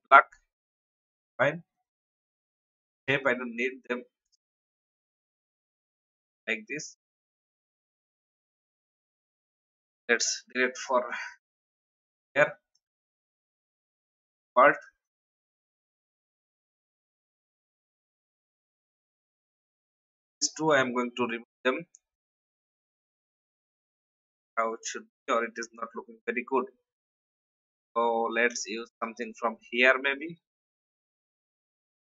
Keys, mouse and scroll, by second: 0.2 alt+scroll up 1, 0.7 click, 3.0 shift+click, 3.7 shift+Delete, 8.2-9.3 drag, 9.6 Delete, 11.2 click, 15.5 Delete, 16.8 ctrl+z, 17.7-18.0 alt+scroll down 1, 18.4 ctrl+a, 18.8 click, 20.6 Delete, 22.1 click, 30.3-30.7 alt+scroll down 1, 31.5-31.8 scroll down 1.